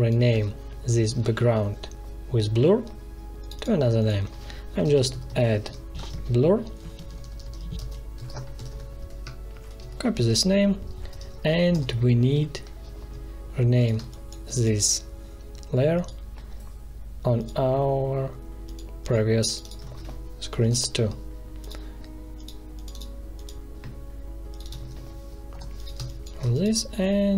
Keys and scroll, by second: 4.8-9.1 typing, 9.4 shift+Up, 10.1 ctrl+c, 11.7 Return, 13.9 space, 19.8 ctrl+v, 20.5 Return, 24.7 ctrl+v, 25.4 Return, 25.9 space.